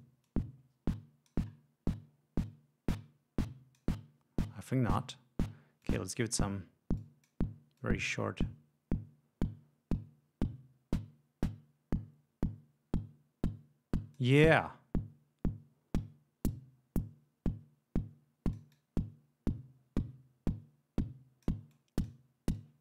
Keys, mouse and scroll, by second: 0.3-1.5 drag, 2.4-4.0 drag, 5.8-6.3 drag, 7.0-7.5 drag, 7.8 click, 8.4-14.4 drag, 14.6-21.6 drag, 21.7-22.3 drag, 22.6-22.8 drag.